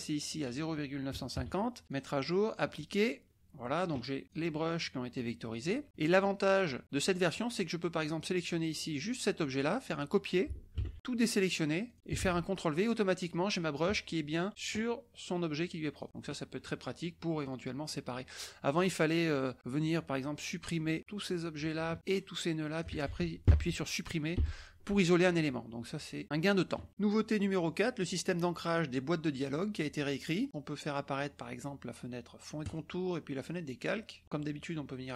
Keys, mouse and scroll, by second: 0.3 click, 1.3 KP_5, 1.9 click, 2.4 click, 3.2 click, 4.2 click, 4.8-6.0 drag, 7.1 click, 8.5-9.9 drag, 10.9 ctrl+c, 11.8 click, 12.2 ctrl+v, 12.9-14.0 drag, 14.5 click, 15.6 click, 16.0 middle click, 16.0 scroll down 1, 16.8 middle click, 16.8-17.2 scroll down 1, 17.3 click, 17.8 click, 18.1 middle click, 18.1-18.5 scroll down 1, 20.7-21.8 drag, 21.9-23.0 shift+drag, 24.3 Delete, 26.2 middle click, 26.8 middle click, 32.6 click, 33.7 click, 34.2-35.1 drag.